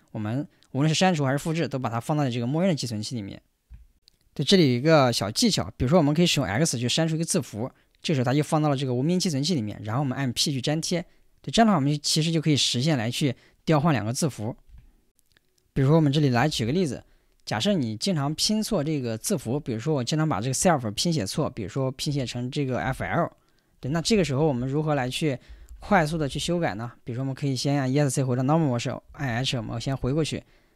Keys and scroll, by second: 17.5 o, 19.4 Tab, 22.1-26.9 typing, 25.4 ctrl+h, 25.7 ctrl+h, 28.5 Escape, 29.1-30.0 typing.